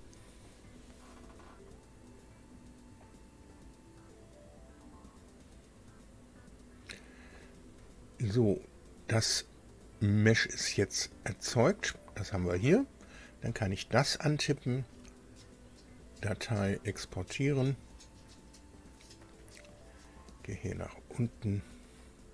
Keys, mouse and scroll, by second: 10.7 scroll up 2, 11.0-11.4 scroll down 2, 13.3 click, 15.7 click, 17.3 click, 20.1 click.